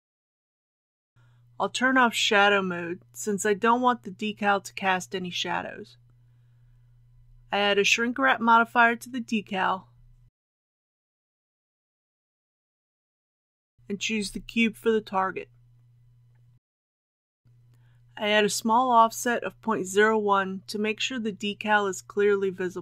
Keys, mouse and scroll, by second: 1.6 click, 6.9 KP_1, 9.0 click, 21.6-22.8 middle drag.